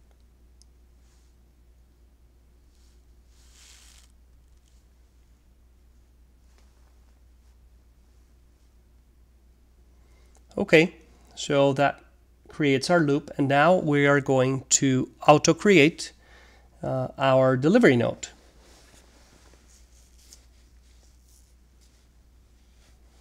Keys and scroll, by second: 0.1-4.9 typing, 6.7 alt+c, 8.0 typing, 12.1 Return, 13.2 BackSpace, 14.4 Return, 15.5 alt+3, 16.3-20.5 typing, 21.7-23.2 typing.